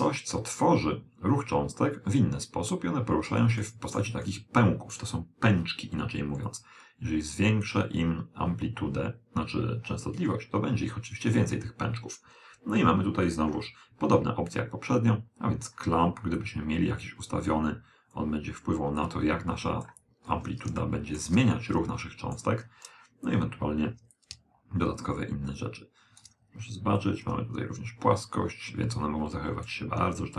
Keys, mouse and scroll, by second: 0.1-1.9 middle drag, 3.7-6.0 middle drag, 6.5 click, 14.5-19.9 drag, 20.3-23.2 middle drag, 24.2 click, 27.1 click.